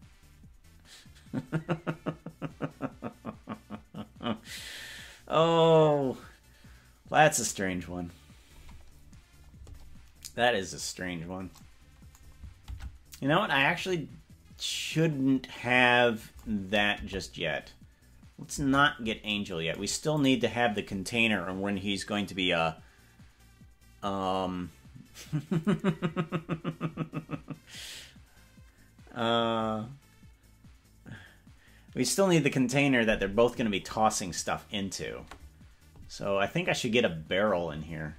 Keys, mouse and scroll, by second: 12.9 ctrl+Tab, 13.4-13.8 scroll down 9, 13.6 scroll up 1, 17.2 KP_0, 18.8 KP_0, 20.2 click.